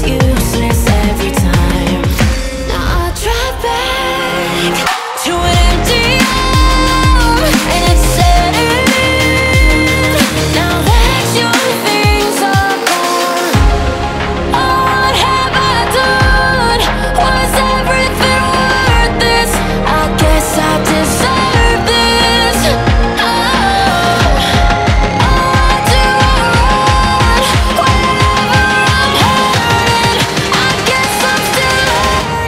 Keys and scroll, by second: 18.9-20.2 typing, 21.9 x, 24.2 x, 26.0 x, 29.7 x, 31.7 x.